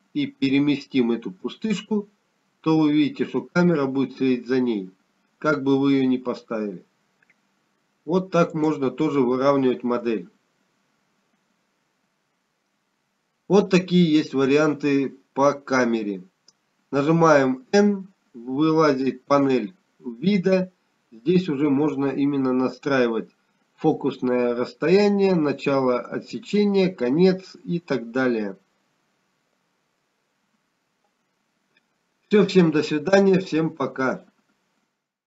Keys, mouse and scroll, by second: 1.9 g, 20.5 n, 32.4 n.